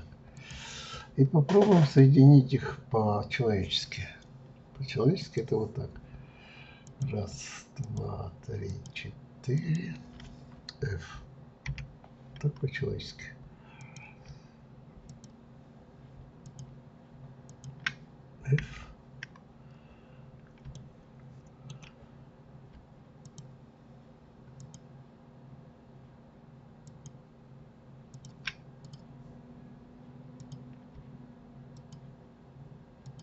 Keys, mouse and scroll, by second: 0.3 click, 0.9-3.9 middle drag, 5.2 click, 6.8 click, 7.8 shift+click, 8.7 shift+click, 9.5 shift+click, 11.7 f, 13.8 click, 15.0 shift+click, 16.4 shift+click, 17.5 shift+click, 18.6 f, 20.3 scroll up 1, 20.7-23.2 shift+middle drag, 23.2 shift+click, 24.6 shift+click, 26.8 shift+click, 28.1 shift+click, 28.8 click, 30.3 click, 31.7 shift+click, 33.0 shift+click.